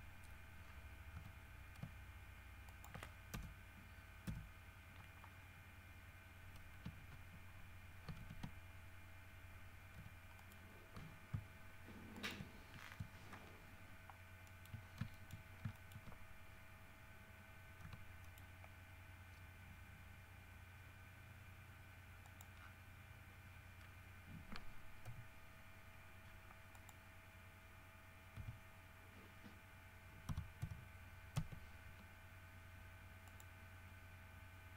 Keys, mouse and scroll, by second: 1.3 r, 2.8 ctrl+click, 3.5 ctrl+KP_0, 4.4 KP_1, 5.5 scroll up 2, 8.3 alt+g, 10.1 g, 10.5 middle click, 12.3 ctrl+middle click, 12.9 ctrl+scroll up 1, 14.6 shift+middle click, 15.0-15.8 shift+scroll up 4, 15.3 shift+middle click, 15.9 shift+middle click, 18.0 g, 18.4 middle click, 22.4 click, 22.7 scroll down 1, 26.9 click, 28.5 s, 30.5 KP_Subtract, 30.8 KP_1, 31.5 KP_Enter, 33.4 middle click.